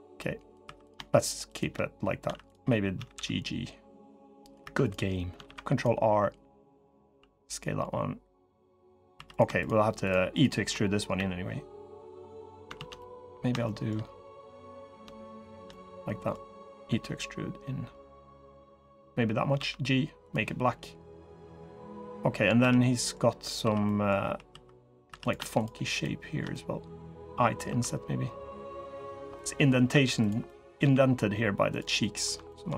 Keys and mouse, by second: 0.4 3, 1.3-1.8 shift+drag, 2.0 1, 2.7 g, 4.4 3, 5.2 ctrl+r, 6.8 s, 8.9 3, 10.5 click, 10.9 e, 12.5 ctrl+z, 12.7 click, 13.4 shift+click, 14.1 click, 15.5 click, 16.6 e, 19.3 g, 21.2 click, 22.3 3, 22.5 click, 23.4 2, 23.6 click, 24.0 3, 24.2 2, 24.8 3, 26.3 click, 27.4 1, 29.1 click, 29.7 1, 30.2 click, 30.6 g, 31.8 click, 32.2 shift+click, 32.5 g.